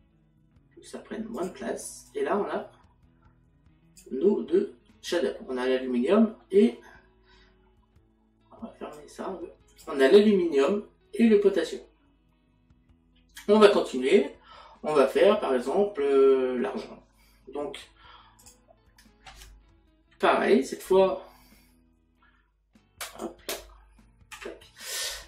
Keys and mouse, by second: 1.4 click, 5.4 middle click, 9.0 click, 18.4 click, 23.1 click, 24.3 Delete.